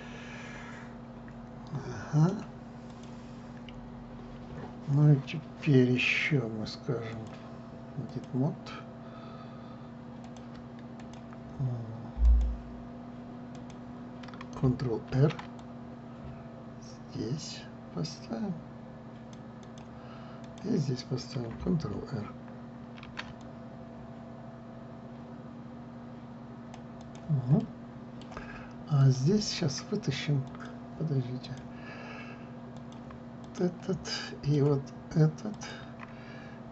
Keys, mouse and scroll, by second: 3.6 click, 5.7 scroll up 2, 7.8-10.8 drag, 10.9 click, 11.7 click, 12.9 click, 14.2 click, 15.8 ctrl+r, 21.1 click, 23.7 ctrl+r, 28.3-29.7 middle drag, 29.7 click, 31.1 click, 32.1 click, 33.5 click, 34.1 click, 34.8-36.2 middle drag, 36.2 shift+click.